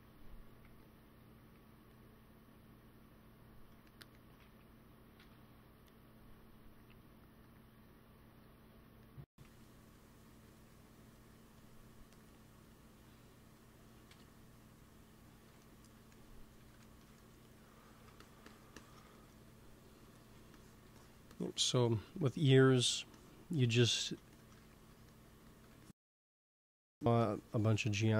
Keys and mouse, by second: 0.5 f, 1.1 f, 1.6-4.7 drag, 4.3 ctrl+z, 5.1 KP_1, 9.3 f, 9.8 click, 10.2 f, 10.7-14.1 drag, 14.0 KP_1, 14.2 click, 15.5 middle click, 16.5 x, 17.3 f, 18.1-20.2 drag, 19.9 f, 22.6 f, 25.3 f, 26.5-28.1 drag, 26.7 f.